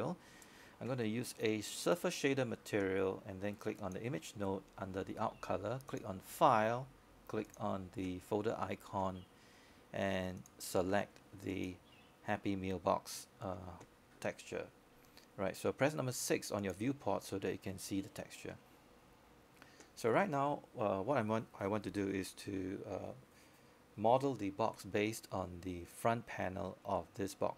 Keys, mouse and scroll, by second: 17.6 6, 17.6 6, 18.1-27.5 drag.